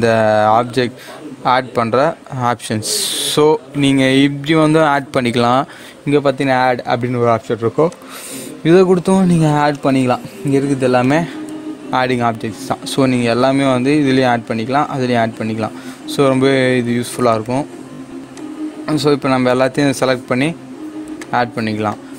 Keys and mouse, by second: 7.9 click, 17.2 right click, 18.2 click, 21.1-22.1 drag.